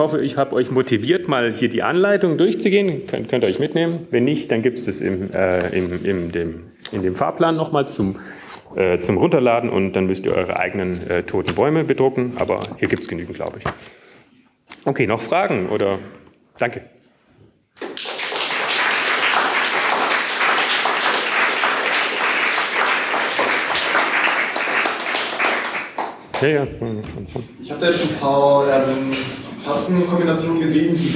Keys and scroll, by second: 1.2 q, 1.6 ctrl+x, 1.6 Return, 1.6 k.